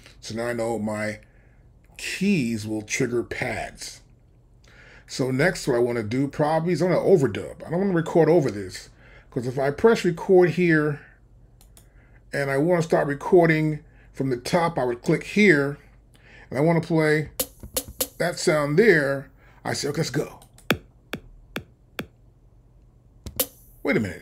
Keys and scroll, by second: 17.3 c, 23.3 c.